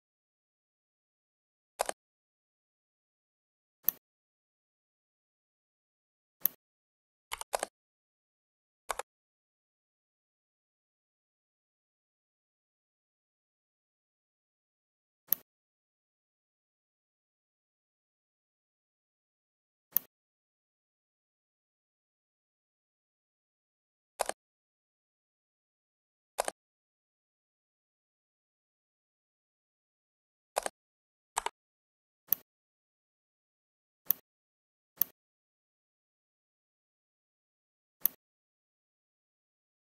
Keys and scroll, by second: 7.2 5, 7.4 0, 8.8 Return.